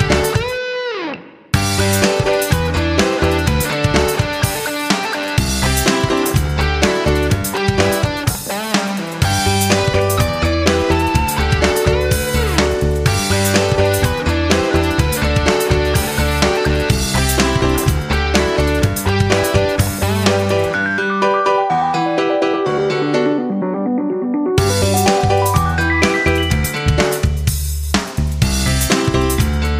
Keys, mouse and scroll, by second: 12.2 BackSpace, 12.8 KP_2, 14.1 click, 15.0 right click, 15.3 BackSpace, 15.8 KP_3, 16.4 F9, 17.1 click.